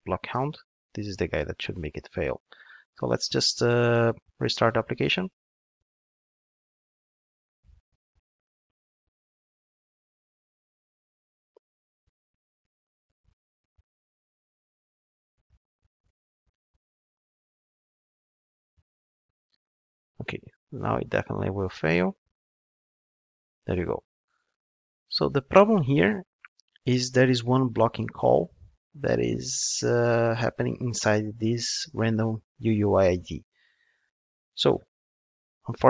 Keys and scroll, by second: 0.3 super+/, 4.7 ctrl+d, 35.2 super+c.